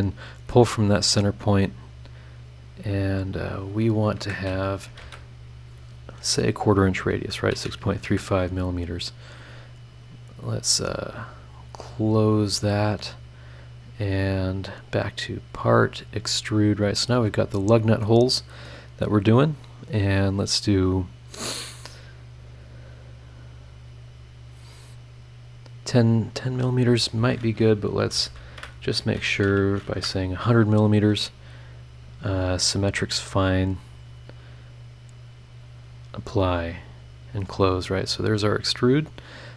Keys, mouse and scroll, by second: 0.8 click, 2.9 click, 3.3 click, 4.1 Escape, 5.0 shift+r, 5.5 shift+click, 7.1 KP_6, 7.5 KP_Decimal, 7.8 KP_3, 7.9 KP_5, 8.0 KP_Enter, 12.3 click, 14.7 click, 15.6 click, 17.0 click, 17.3 scroll up 1, 18.0 middle click, 18.1 click, 18.1 right click, 26.6 click, 28.0 BackSpace, 29.3 BackSpace, 29.9 KP_0, 32.2 click, 32.7 click, 35.8 click, 36.8 click, 37.8 click, 38.2 click.